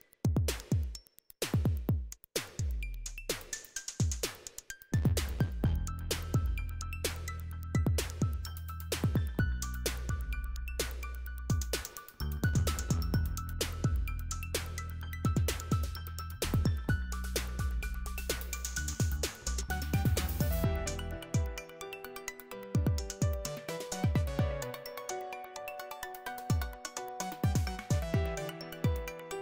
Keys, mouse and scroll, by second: 3.3-4.3 scroll down 1, 4.3-6.3 scroll down 1, 6.3-7.3 scroll down 1, 7.3-8.1 scroll down 1, 8.1-9.4 scroll down 1, 9.4-12.2 scroll down 1, 12.2 click, 17.0 click, 23.0-23.7 scroll down 2, 23.7-25.1 scroll down 1, 25.1-27.8 scroll down 1, 27.8-29.3 scroll down 1, 29.3-29.4 scroll down 1.